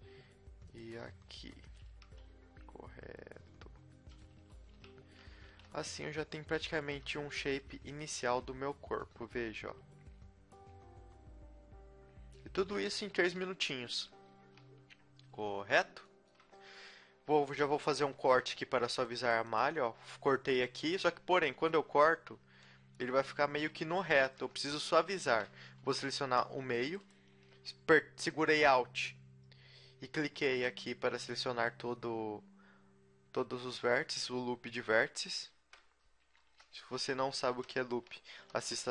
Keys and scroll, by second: 1.0 r, 2.3 s, 4.3-6.9 typing, 8.5 a, 13.2 KP_3, 14.4 z, 15.3 z, 18.3 ctrl+r, 20.7 a, 21.9 Tab, 24.4 KP_3, 25.3 Tab, 25.9 a, 26.3 a, 36.5 KP_3, 36.9 KP_3, 37.9 z, 38.2 g.